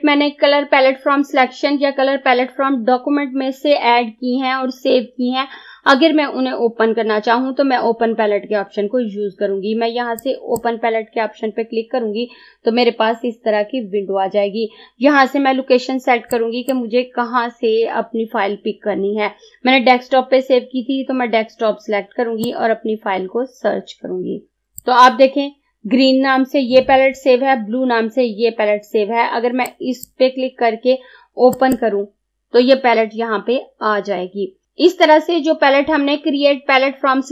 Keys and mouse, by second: 10.3-13.2 drag, 16.4-22.5 drag, 22.5-29.8 drag, 29.8 click.